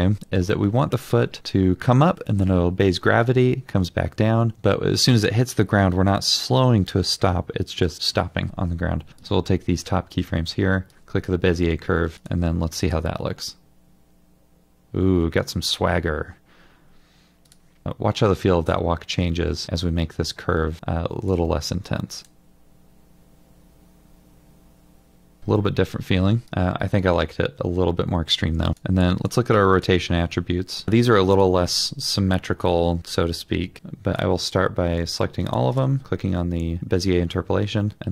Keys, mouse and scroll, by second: 12.9 double click, 22.2 double click, 29.8 double click, 31.4 ctrl+click.